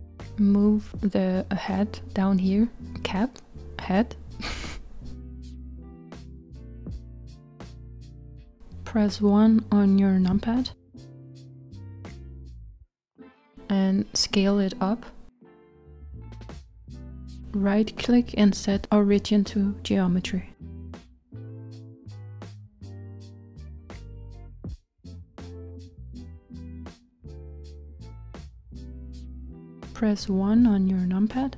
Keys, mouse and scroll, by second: 3.1-3.4 z, 5.3-6.8 shift+middle drag, 6.8-8.2 scroll up 2, 9.3 KP_1, 10.6-11.3 scroll down 2, 11.3-12.6 scroll up 1, 12.6 s, 18.3 right click, 25.1-31.2 middle drag.